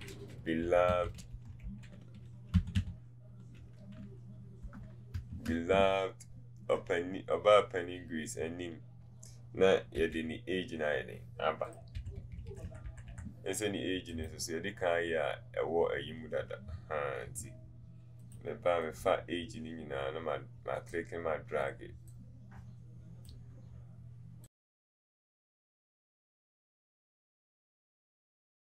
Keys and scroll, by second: 10.1 v, 10.2 v.